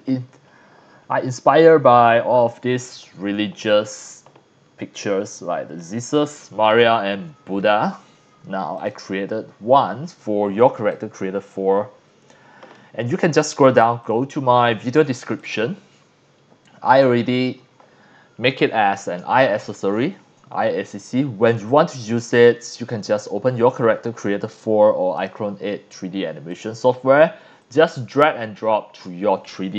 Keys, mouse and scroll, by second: 8.7 click, 9.7-10.3 scroll up 4, 10.3-10.6 scroll down 4, 10.8 c, 10.9 click, 14.0 click, 15.4 click, 21.7 click, 22.7 scroll up 2, 25.1 click, 26.5-26.9 drag, 27.6-29.0 drag.